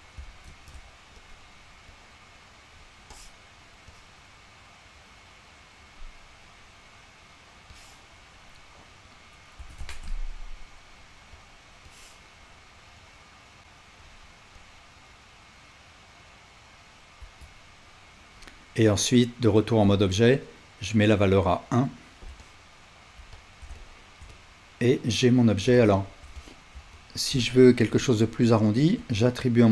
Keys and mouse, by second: 0.5 s, 2.0-3.7 drag, 9.6-11.4 shift+drag, 9.6-29.0 shift+right drag, 9.6 s, 11.9-14.1 drag, 13.6 s, 14.6-23.4 drag, 17.2 Tab, 23.7-27.0 shift+drag, 27.4-29.0 shift+drag.